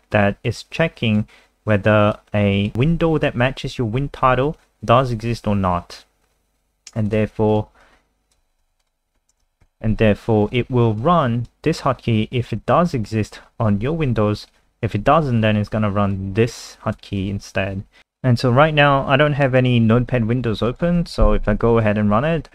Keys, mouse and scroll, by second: 7.8 click, 8.7 ctrl+c, 8.9 click, 9.3 Return, 9.5 ctrl+v, 9.6 ctrl+s, 11.0 click, 18.0 ctrl+alt+r, 19.6 click, 21.0 F5.